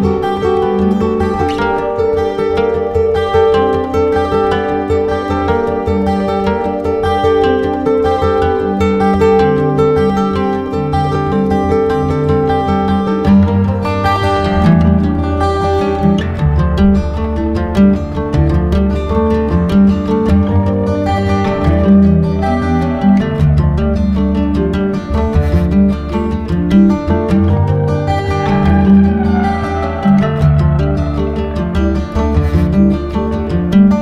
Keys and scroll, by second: 21.3 ctrl+alt+shift+e.